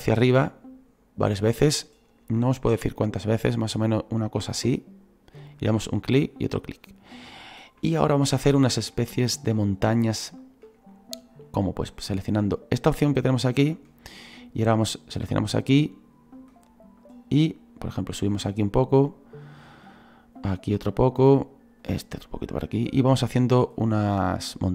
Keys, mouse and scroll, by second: 22.3-24.7 drag.